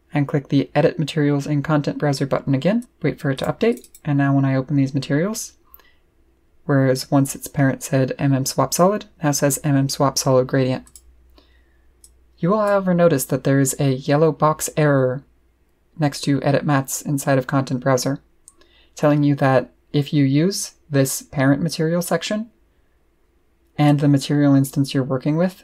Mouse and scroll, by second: 2.8 click, 3.3 click, 3.7 click, 3.8 click, 4.8-5.5 scroll down 2, 10.8 click, 12.0 click, 23.8 click.